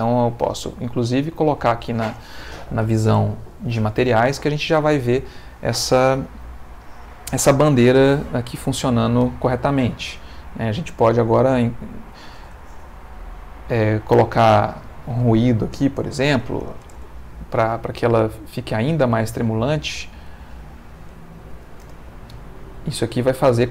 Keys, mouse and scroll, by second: 0.4 click, 14.7 click, 16.3 1, 16.4 0, 16.9 Return, 18.7 click, 20.2 click, 21.4 1, 21.5 0, 21.8 Return, 23.4 click.